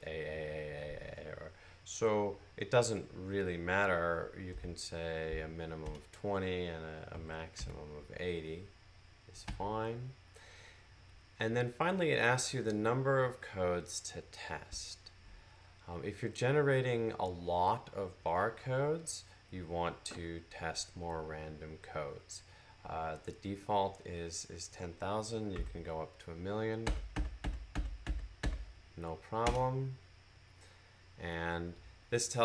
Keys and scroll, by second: 4.4-5.1 typing, 7.0-7.4 typing, 25.4 typing, 26.7-28.3 typing.